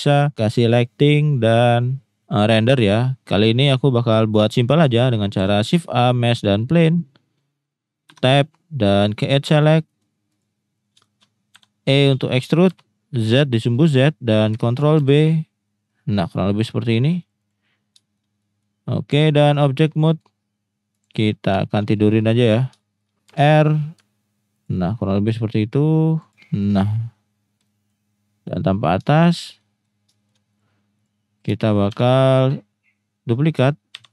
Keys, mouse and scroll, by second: 3.5 middle click, 3.9-4.3 middle drag, 5.4 shift+a, 6.9 middle click, 8.1 Tab, 9.5 click, 10.0 middle click, 11.1 shift+middle click, 11.5 e, 12.7 z, 13.7 click, 15.0 ctrl+b, 17.2 click, 17.5 click, 17.9 shift+middle click, 18.6 middle click, 19.3-19.7 drag, 20.1 middle click, 21.0 click, 21.7 shift+middle click, 22.3-22.6 drag, 22.9 shift+middle click, 23.3 r, 24.5 ctrl+click, 25.1-26.2 drag, 26.3-26.7 drag, 26.7-27.0 middle drag, 27.6 middle drag, 29.2 shift+middle drag, 30.2 shift+middle click, 31.9 shift+d, 33.9 x.